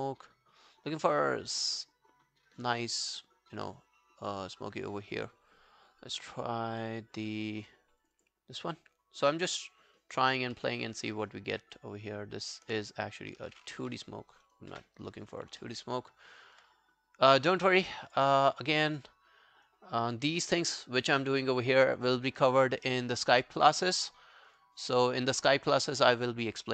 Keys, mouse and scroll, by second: 8.2 double click, 9.4 alt+middle click, 10.0 alt+scroll down 1, 10.3 alt+click, 10.6 alt+middle click, 10.9 alt+right click, 11.1 alt+middle click, 11.8 alt+click, 14.8 Delete, 15.3 scroll down 1, 15.6 alt+middle click, 15.9 alt+right click, 18.4 double click.